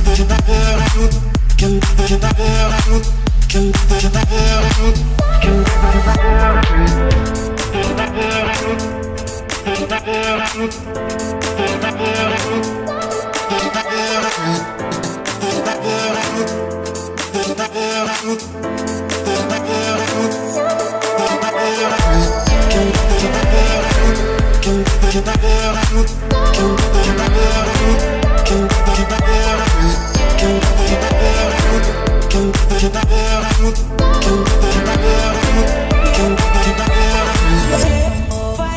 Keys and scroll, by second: 3.9 Escape, 5.8-8.8 typing, 10.0-12.7 typing, 13.8 a, 14.6 s, 14.8 w, 16.4 Escape, 20.8 Escape, 24.1 Escape, 26.0-31.7 typing, 32.7 Escape, 33.1 Escape.